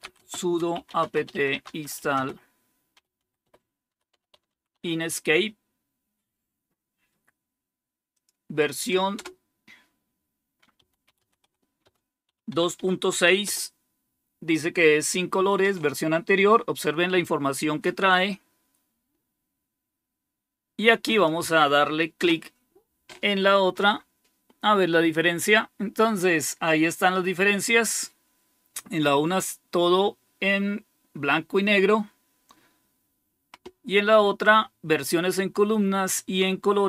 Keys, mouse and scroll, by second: 0.0-5.1 typing, 8.1 click, 9.0 typing, 10.7-13.8 typing, 21.0-28.9 drag, 28.9-36.0 scroll up 1, 36.0-36.8 scroll up 1.